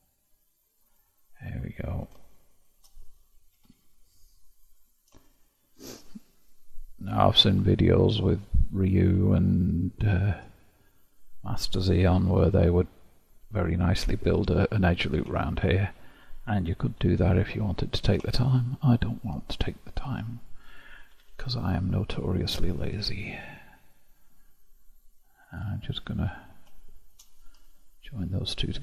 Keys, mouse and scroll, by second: 0.9 click, 1.5-3.5 middle drag, 3.5 g, 5.3-6.8 shift+middle drag, 6.8 click, 7.2 g, 9.3-11.6 shift+middle drag, 11.6 click, 12.2 g, 15.4-16.4 shift+middle drag, 16.4 click, 16.9 g, 18.3-20.6 shift+middle drag, 20.6 click, 21.0 g, 22.8-24.2 middle drag, 24.2-24.8 scroll down 1, 24.8-25.5 scroll down 1, 25.5-27.2 drag, 27.6 0.